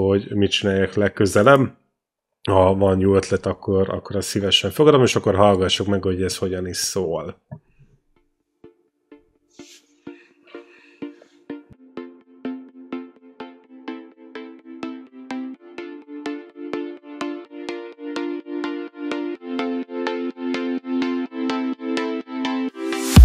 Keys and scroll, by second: 7.7 space.